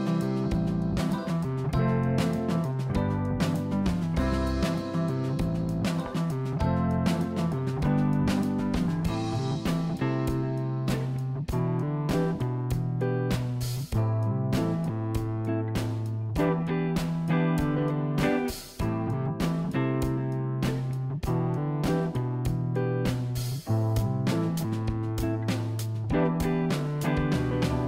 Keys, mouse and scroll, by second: 0.2 click, 0.8-2.4 middle drag, 4.9-5.3 scroll up 1, 5.3-5.7 scroll down 2, 5.7-7.4 middle drag, 8.0 click, 12.2 e, 15.5 click, 16.4 KP_1, 18.9 e, 23.5 s.